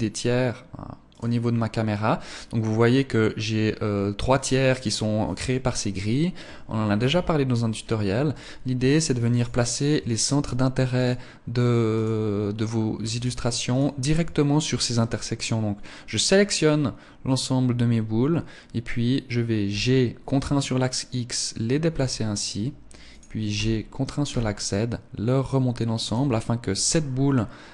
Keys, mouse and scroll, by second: 0.5 right click, 6.6-7.2 scroll up 1, 7.2-7.8 scroll down 1, 7.8 right click, 10.4 shift+right click, 12.6 shift+right click, 13.2 shift+right click, 19.1 g, 22.6 click, 23.0 g, 25.5 click.